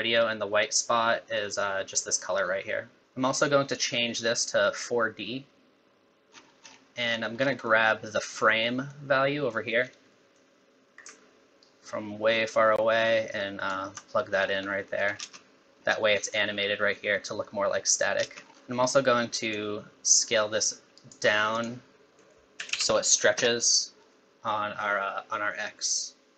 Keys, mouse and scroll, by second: 3.0 middle click, 3.0 scroll up 8, 3.7 click, 6.3-7.7 scroll down 16, 7.7 middle click, 9.3 middle click, 9.8-10.3 scroll down 2, 10.1 middle click, 11.6 alt+right click, 14.4 scroll up 4, 14.7 middle click, 15.2 space, 18.4 scroll up 15, 18.5 middle click, 18.7 middle click, 19.5 shift+click, 21.7 click, 26.0 click.